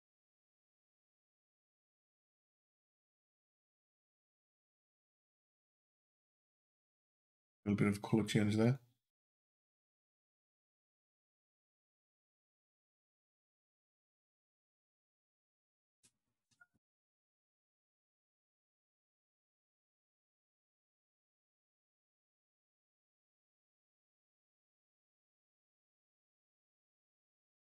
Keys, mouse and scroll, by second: 0.2 Down, 2.2 Up, 2.5 Down, 3.0 Down, 3.3 Up, 3.9 Up, 6.3 Down, 8.5 click, 9.1 Up, 10.4 click, 10.9 Up, 11.3 Up, 20.8 click, 22.8 click, 24.9 l, 25.9 l, 27.3 click.